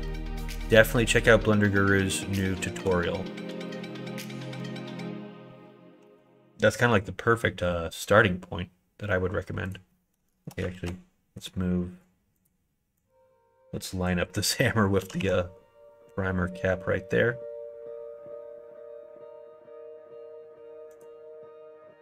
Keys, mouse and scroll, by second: 2.7 3, 4.5 g, 10.7 ctrl+z, 11.3 right click, 11.9 click, 12.3 click, 12.9-14.0 drag, 15.0 g.